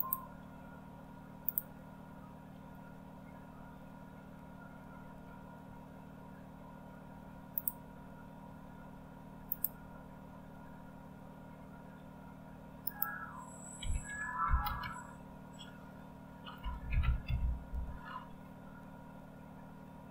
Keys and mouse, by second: 0.0 click, 1.8 click, 5.3 Escape, 7.8 click, 14.3 typing, 16.4-17.7 typing.